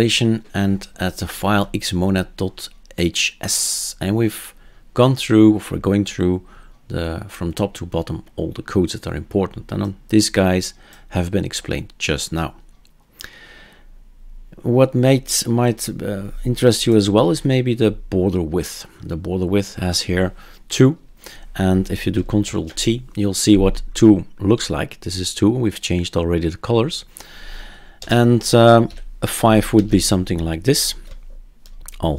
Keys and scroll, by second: 22.4 ctrl+alt+t, 28.0-28.9 typing, 29.7 ctrl+s.